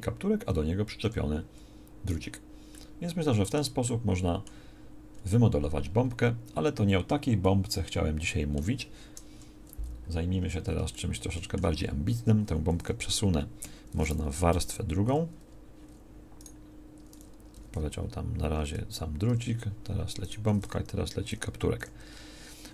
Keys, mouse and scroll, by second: 3.1 middle click, 9.3 KP_1, 13.6 Escape, 14.4 m, 17.6 m, 21.3 m.